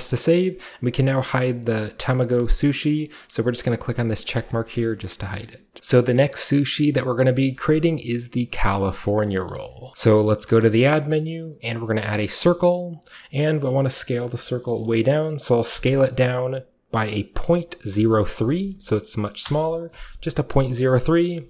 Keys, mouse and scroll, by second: 4.3 click, 4.7-6.0 shift+middle drag, 4.7-5.0 scroll up 1, 5.0-5.8 shift+scroll down 1, 5.8 ctrl+alt+Left, 6.2-7.3 shift+middle drag, 7.5-9.0 shift+middle drag, 9.0-9.9 shift+scroll down 1, 9.4-12.4 shift+middle drag, 12.4-13.6 drag, 13.0-13.6 scroll down 1, 13.6-14.8 scroll down 1, 13.7 middle drag, 14.0 shift+middle click, 14.5 shift+middle click, 14.8-17.9 shift+middle drag, 17.9-18.4 typing, 19.5 Return, 21.2 ..